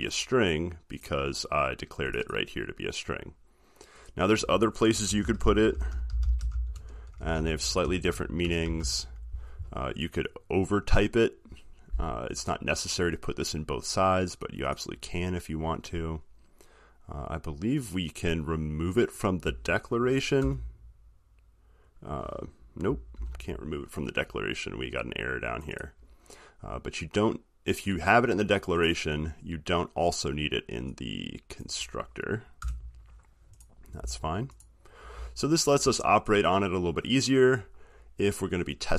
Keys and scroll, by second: 23.4 ctrl+z.